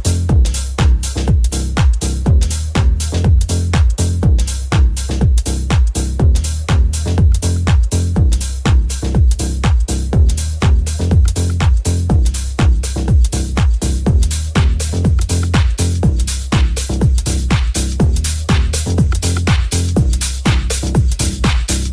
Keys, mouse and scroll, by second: 3.1-21.9 drag, 4.6 n, 7.9 n, 12.8-14.1 shift+middle drag, 13.5 right click, 15.3 n, 18.1 n.